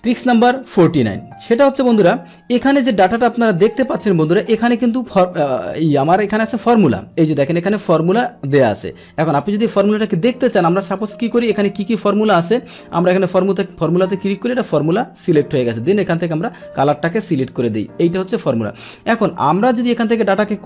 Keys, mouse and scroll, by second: 3.0 click, 3.8 Right, 3.8 click, 4.0 Right, 5.2 Right, 5.5 Right, 7.0 right click, 7.0 click, 7.5 right click, 8.0 click, 9.6 click, 11.0 click, 11.5 click, 13.0 click, 15.4 click, 17.6 click, 18.1 click, 19.1-20.2 drag.